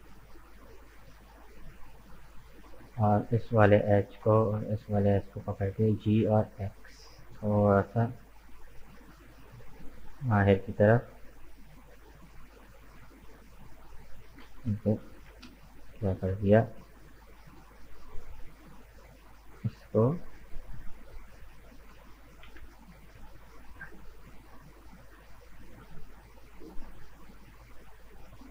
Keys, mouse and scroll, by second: 0.4-2.5 middle drag, 2.5 right click, 3.1-4.8 middle drag, 4.8 shift+right click, 5.6 g, 10.4-12.5 middle drag, 12.5 scroll down 1, 13.2 right click, 13.8 middle click, 14.7 ctrl+z, 15.2 ctrl+z, 15.8 right click, 17.5-19.9 middle drag, 19.9 scroll down 1, 19.9-22.0 middle drag, 22.0 ctrl+z, 22.4 ctrl+z, 23.2 ctrl+z, 23.7-27.0 middle drag, 27.0-28.1 drag, 28.1 right click.